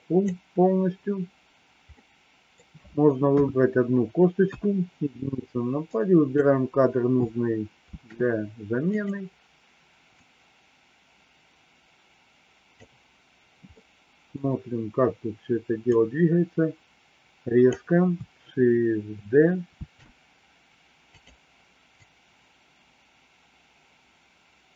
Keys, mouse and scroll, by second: 1.9 middle click, 3.2 KP_3, 4.5 KP_1, 5.9 click, 7.9 shift+d, 10.2-12.8 drag, 13.6 middle click, 15.9-17.6 drag, 19.7 shift+d, 22.0-24.7 drag.